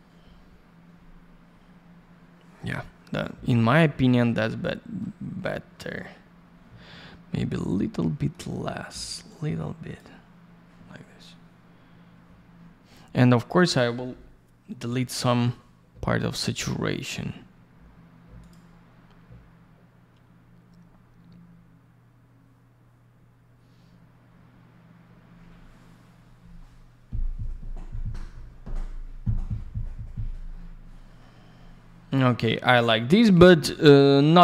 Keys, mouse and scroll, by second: 3.4-4.2 scroll down 1, 4.2 middle click, 5.2-5.6 scroll up 1, 6.4 scroll down 1, 7.0-8.0 scroll up 1, 8.0 middle click, 9.2 click, 13.4 click, 13.5 click, 13.6 double click, 18.3 click, 18.6 click, 31.1 scroll down 1.